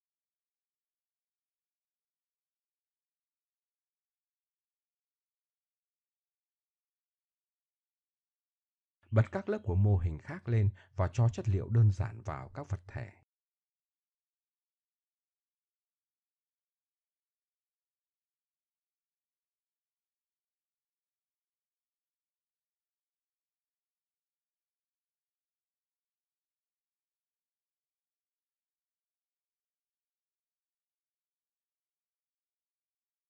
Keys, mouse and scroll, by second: 1.8 Tab, 3.1 KP_1, 3.6 click, 4.2 middle click, 4.3 Tab, 5.5 click, 6.0 middle click, 7.3 middle click, 8.0 click, 8.5-10.0 middle drag, 10.5 right click, 10.8 middle click, 11.7 middle click, 12.5 right click, 14.7-15.2 drag, 15.2 middle click, 15.3-16.6 drag, 16.6 middle click, 16.9 click, 17.8 middle click, 21.1 click, 22.3-22.8 drag, 23.2 click, 23.9 click, 25.0 click, 26.4 click, 28.1 middle click, 29.2 Tab, 29.9 Tab, 29.9 z, 30.1 z.